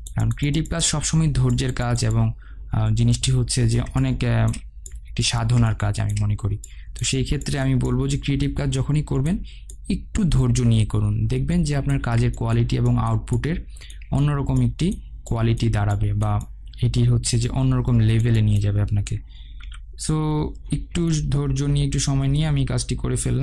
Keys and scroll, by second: 20.3 ctrl+0.